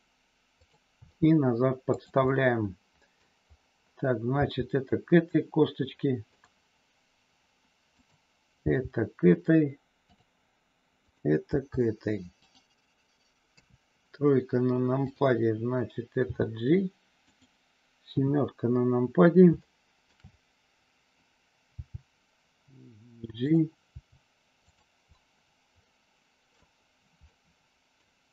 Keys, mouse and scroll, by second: 0.6 click, 0.9 g, 2.2-3.2 middle drag, 4.3 g, 6.3 click, 7.8 click, 8.7 g, 11.1 click, 13.5 KP_3, 16.3 g, 17.3 click, 18.1 KP_7, 19.7 scroll up 1, 19.8 middle click, 21.8 g, 23.5 click, 23.9 g, 24.6 click, 25.2-26.5 middle drag, 26.5 scroll down 1, 27.2 middle click.